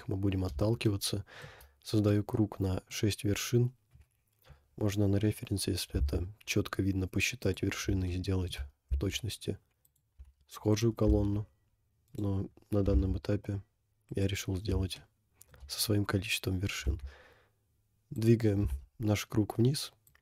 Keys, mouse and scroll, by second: 0.2-0.5 scroll up 2, 0.9 shift+middle click, 1.4 shift+click, 2.1 middle click, 3.9 KP_1, 8.2 shift+middle click, 9.1 s, 10.2 g, 11.1 g, 12.8 g, 14.4 scroll up 2, 15.1 shift+middle click, 16.1 scroll up 2, 17.0 s.